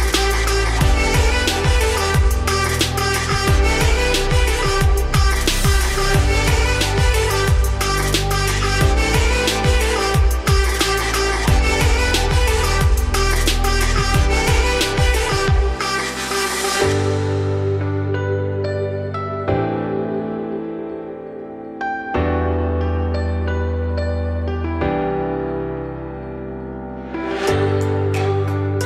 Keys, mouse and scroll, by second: 0.4-1.6 scroll up 1, 1.6-3.4 middle drag, 3.4 `, 3.8 right click, 4.7-5.2 scroll up 2, 5.2 ctrl+r, 8.2 scroll down 3, 8.3 middle click, 8.9 Tab, 9.5-9.8 scroll down 3, 9.8 shift+middle drag, 10.0-10.5 scroll up 3, 11.5 scroll down 1, 11.6-11.9 middle drag, 11.9 Tab, 12.2 click, 13.0 z, 13.5 3, 13.7 click, 14.6 click, 15.0 `, 15.4 scroll up 3, 16.2 ctrl+b, 17.4 i, 22.7 scroll up 2, 23.0 x, 23.8 z, 24.1 scroll down 3, 24.2 middle click, 24.8 click, 25.5 2, 25.7 click, 26.1 shift+click, 26.9 f, 27.7 click, 28.0 f, 28.1 f, 28.6-28.8 middle drag.